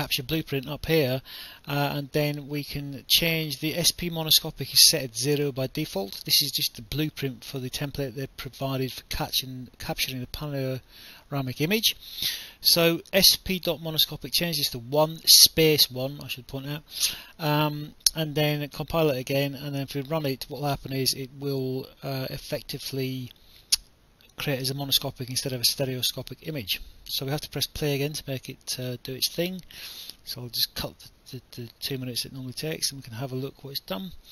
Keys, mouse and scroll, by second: 27.2 right click, 27.9 click, 29.0 right click, 30.2 alt+F9, 31.1 click, 32.3 click, 33.7 click.